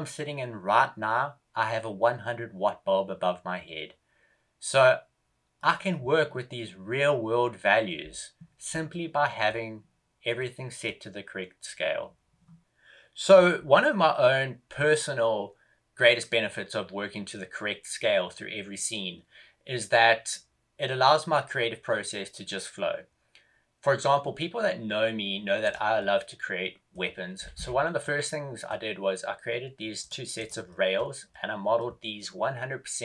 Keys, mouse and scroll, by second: 8.8 middle click, 10.3 middle click.